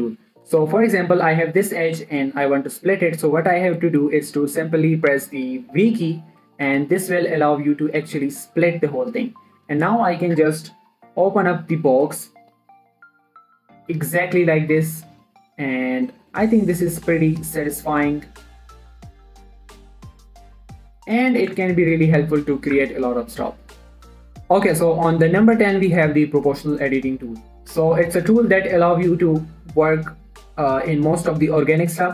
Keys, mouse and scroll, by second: 0.4 middle click, 0.8 shift+middle click, 1.2 Tab, 1.6 click, 2.1 scroll down 1, 2.1 middle click, 2.2 scroll up 1, 2.3 g, 2.6 right click, 2.9 middle click, 7.0 v, 9.6 click, 12.5 middle click, 13.6 v, 15.2 click, 16.0 scroll down 1, 16.1 middle click, 17.3 v, 18.4 right click, 18.9 click, 19.3 g, 20.4 click, 20.7 middle click, 21.9 Tab, 22.1-24.3 middle drag, 27.5 scroll up 1, 27.7 middle click, 28.1 shift+middle click, 28.7 Tab, 29.1 1, 29.8 click.